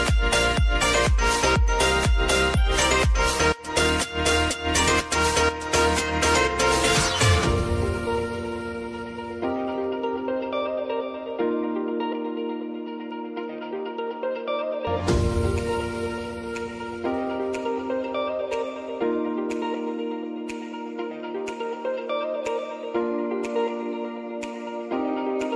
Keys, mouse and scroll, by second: 2.5 ctrl+alt+Home, 4.4 click, 7.8 s, 8.9-11.3 drag, 14.6-17.8 drag, 21.2 ctrl+alt+Home, 22.6 click.